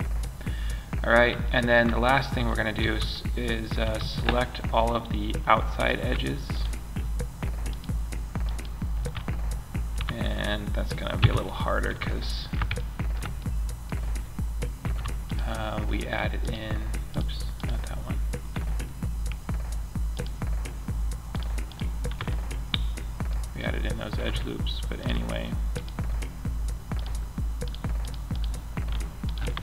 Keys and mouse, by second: 2.2 a, 3.2 a, 8.6-9.7 middle drag, 10.5 KP_Decimal, 14.6-16.4 middle drag, 17.1 click, 28.4-29.6 middle drag.